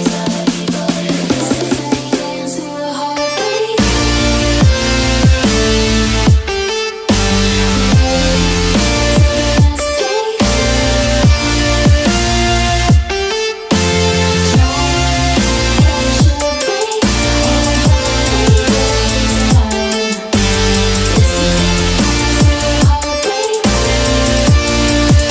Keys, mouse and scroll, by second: 0.2 click, 2.1 click, 3.7 right click, 5.6 click, 8.5 click, 8.9 click, 9.4 click, 9.7 click, 11.8 click, 16.9 click, 17.7-18.1 ctrl+scroll down 2, 19.5 right click, 20.8 click, 21.9 right click, 23.1 click.